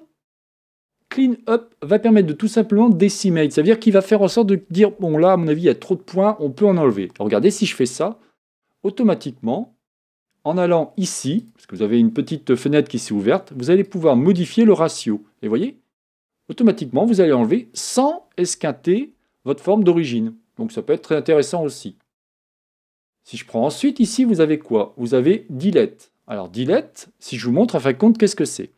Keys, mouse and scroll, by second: 11.4 click, 13.9-16.9 drag, 19.2 Tab, 21.5 Tab, 23.0-28.6 drag.